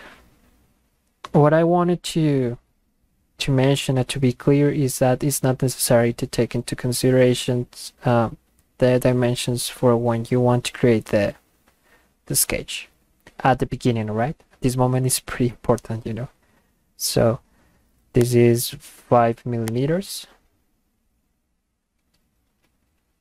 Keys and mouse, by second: 18.2 click, 19.7 click.